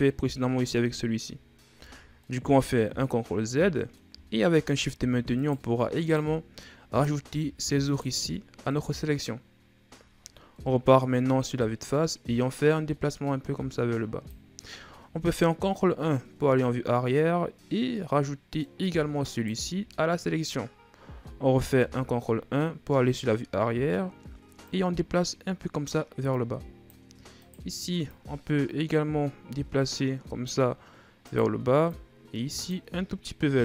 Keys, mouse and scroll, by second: 1.6 ctrl+z, 2.0-4.1 middle drag, 4.1-4.6 scroll down 3, 4.6-5.2 scroll up 2, 5.2 shift+right click, 5.9 shift+right click, 6.2 scroll down 1, 6.4-7.6 middle drag, 7.6 shift+right click, 8.5-10.3 middle drag, 10.3 KP_1, 12.3-15.4 drag, 15.5 ctrl+KP_1, 17.7 scroll down 1, 17.8-19.1 middle drag, 19.1 shift+right click, 21.6 ctrl+KP_1, 24.5-27.2 drag, 27.2 right click, 27.9-30.9 drag, 31.1 right click, 31.7-33.6 drag.